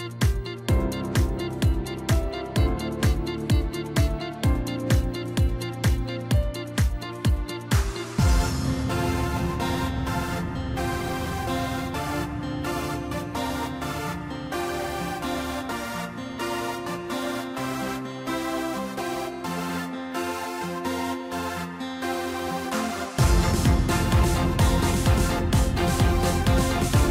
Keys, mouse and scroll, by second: 2.5 shift+click, 3.0 shift+click, 3.5 shift+click, 3.9 shift+click, 4.6 shift+click, 5.1 shift+click, 5.5 shift+click, 6.4 shift+click, 8.2-11.3 drag, 18.2-23.3 right drag, 23.3-23.7 scroll up 1, 23.7-24.5 scroll down 1, 24.5 x, 25.6 middle click, 26.4-27.1 scroll up 1.